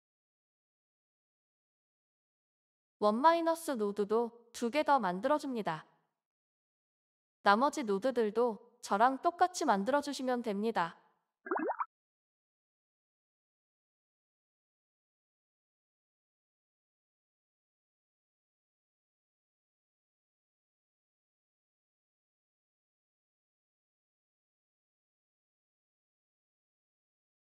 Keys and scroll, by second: 3.2 ctrl+c, 4.1 ctrl+v, 5.2 ctrl+v, 7.1 m, 10.0-11.0 typing, 13.4 typing, 14.7-15.7 typing, 18.5 ctrl+a, 19.3-20.5 typing, 23.0-23.8 typing.